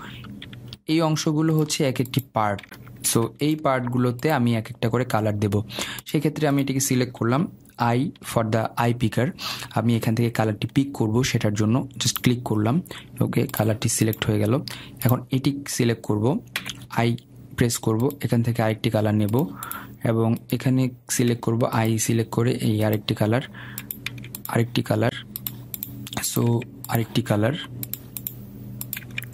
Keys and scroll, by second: 1.2 Escape, 3.8 ctrl+z.